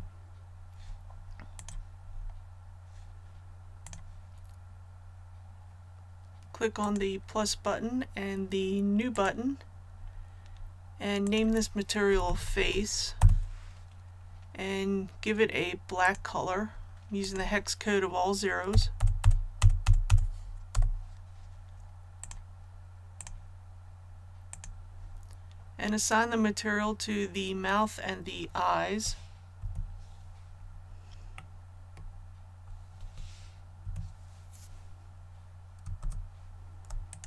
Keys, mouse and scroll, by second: 1.6 click, 2.0-3.2 scroll down 1, 3.8-12.3 drag, 12.1-13.1 typing, 13.2 Return, 16.0-18.3 drag, 18.7 KP_0, 22.2 click, 30.5 scroll up 1, 31.3 middle click, 36.0 ctrl+z, 37.1 shift+right click.